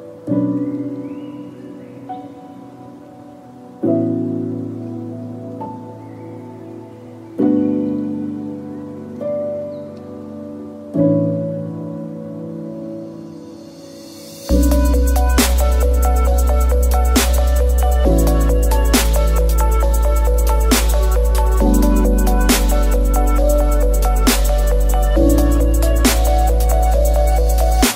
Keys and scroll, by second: 1.2 ctrl+z, 1.7-2.6 typing, 2.0 Tab, 2.8 Return, 8.8 F2, 10.6 Delete, 12.2 Tab, 14.4 F2, 16.0 Tab, 18.8 Tab, 19.5 Tab, 24.6 ctrl+z, 26.3 Tab, 26.7 x, 27.0 Return, 27.1 Return.